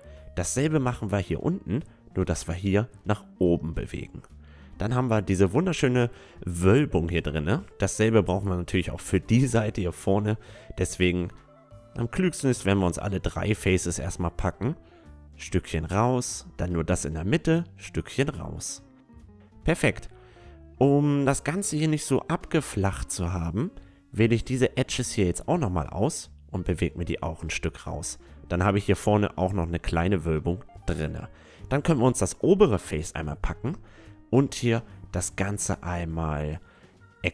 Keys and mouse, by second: 0.3-3.1 middle drag, 1.0-3.9 right drag, 3.1-4.8 drag, 4.6 Tab, 5.4-6.4 middle drag, 7.2 Tab, 7.8-9.6 middle drag, 8.6-12.7 drag, 8.6-9.6 right drag, 10.1-11.9 right drag, 14.3-16.9 right drag, 15.7-17.6 drag, 17.2-18.9 right drag, 18.3-19.7 drag, 18.8 Tab, 19.7-21.8 middle drag, 21.8 Tab, 23.3-25.2 drag, 24.0-27.2 right drag, 24.3 middle click, 24.5 middle click, 24.7 middle click, 25.8 middle click, 26.0-27.5 middle drag, 26.9-28.6 drag, 28.1 Tab, 30.0 Tab, 31.2-33.1 drag, 31.7-33.1 right drag, 33.6 middle click, 34.8-37.0 middle drag, 37.0 e.